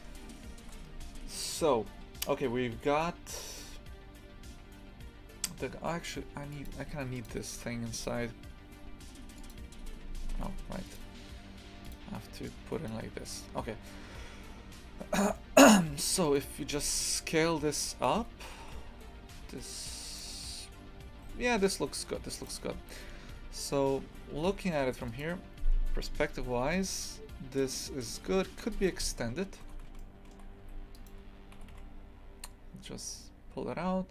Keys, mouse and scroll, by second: 0.0 shift+middle click, 0.7 scroll down 1, 9.5 click, 10.4 Tab, 13.6 scroll up 1, 14.1 scroll down 2, 15.3 shift+middle click, 16.2 right click, 16.7 s, 28.7 right click, 29.1 scroll up 1, 29.6 Tab, 29.9 shift+middle click, 30.6 2, 30.9 right click, 31.6 g.